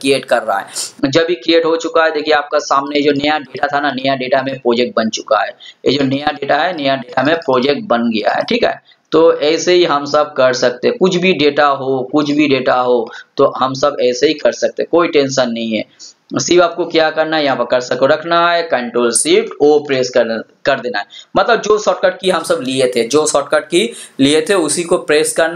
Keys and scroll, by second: 19.5 ctrl+shift+o.